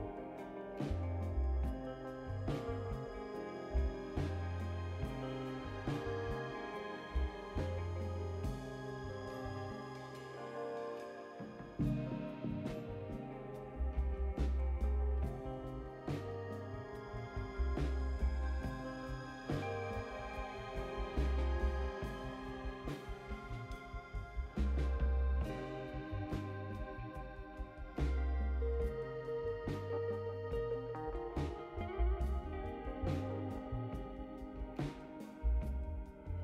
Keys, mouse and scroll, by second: 0.8 ctrl+v, 3.4 click, 3.8 ctrl+v, 4.6 click, 5.7 ctrl+v, 9.0 click, 10.0 ctrl+click, 10.8 ctrl+click, 13.0 click, 14.9 click, 16.5 click, 17.7 click, 21.5 click, 23.5 click, 25.6 click, 26.9 click, 28.2 click, 29.3 5, 29.7 0, 30.7 Return, 31.2 middle click, 31.2-31.7 scroll down 4, 31.5 middle click, 33.8 click, 35.0 click, 35.4-36.4 typing.